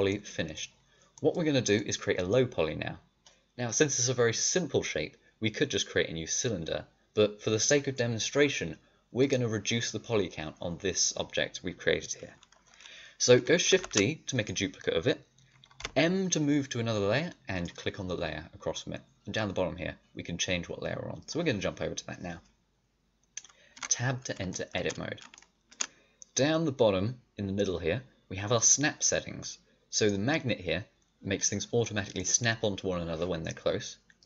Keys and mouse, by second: 11.3-13.6 drag, 13.6 shift+d, 15.7 m, 23.7 Tab, 29.9-32.1 drag, 32.1-34.1 middle drag, 34.1-34.2 drag.